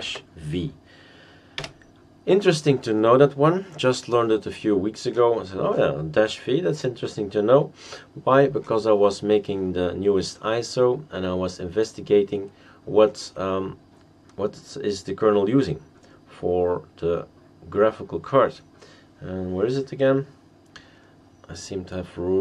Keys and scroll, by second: 1.6 Return.